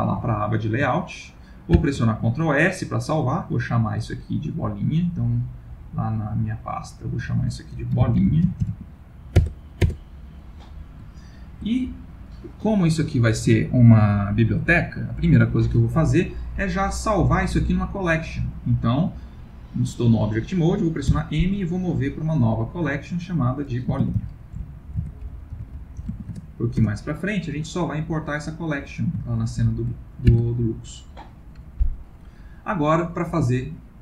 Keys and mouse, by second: 0.4 ctrl+middle click, 1.8 ctrl+s, 11.2 ctrl+middle click, 11.3 ctrl+middle click, 16.8 middle click, 18.0 middle click, 21.0 m, 29.2 ctrl+middle click, 30.3 ctrl+s, 32.0 middle click.